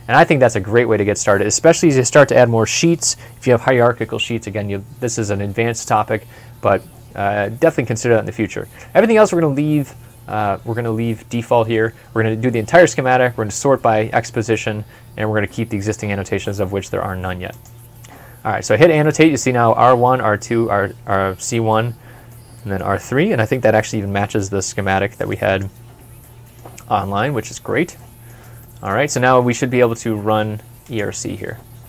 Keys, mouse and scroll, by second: 21.7 middle click, 26.0 middle click, 26.7 scroll up 1, 27.1 scroll down 1, 27.8 middle click.